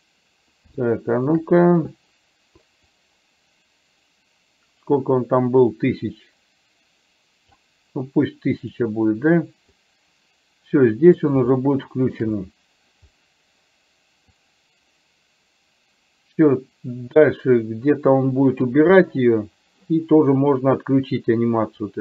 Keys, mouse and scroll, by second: 1.0 shift+middle click, 3.0-7.6 drag, 8.7 click, 10.1-11.5 drag, 11.7 shift+middle click, 14.7-19.0 drag.